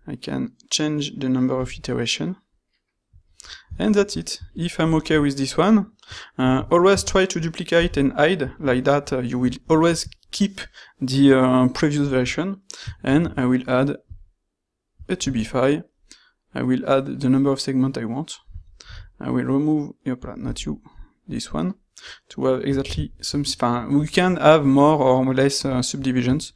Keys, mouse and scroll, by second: 2.3-2.7 shift+middle drag, 3.4-3.8 middle drag, 4.2-4.8 shift+middle drag, 6.4 shift+d, 7.7 h, 13.0 ctrl+shift+q.